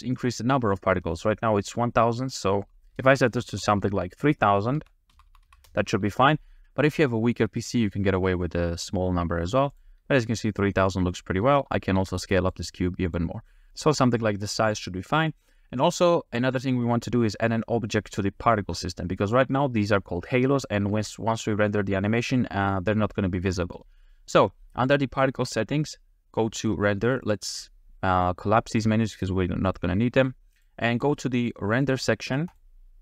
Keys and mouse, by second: 2.3-5.7 drag, 5.3 0, 5.4 0, 9.7 click, 10.2 middle click, 12.0 s, 13.1 s, 13.7 space, 13.7 a, 16.4 middle click, 26.6 click, 27.3 click, 28.7 click, 29.7 click, 30.6-31.5 drag, 31.7 click, 32.5 click.